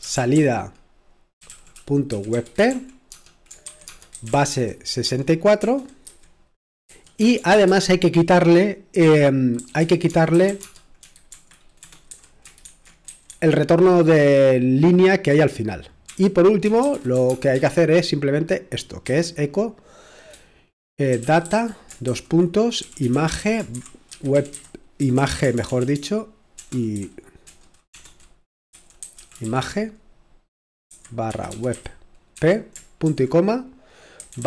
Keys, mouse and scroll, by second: 0.0-5.0 typing, 6.9-7.5 typing, 9.6-10.5 typing, 12.6-13.8 typing, 15.8-17.6 typing, 19.0 typing, 21.1-29.4 typing, 30.9-33.0 typing, 34.2-34.4 typing.